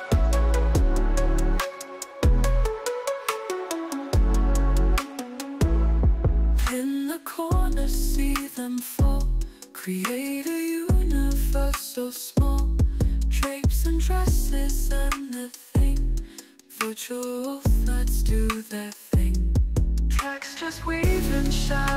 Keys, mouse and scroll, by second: 4.9 click, 6.3 click, 6.8 ctrl+Tab, 8.5 alt+click, 9.0 alt+middle click, 15.2 click, 19.1 click.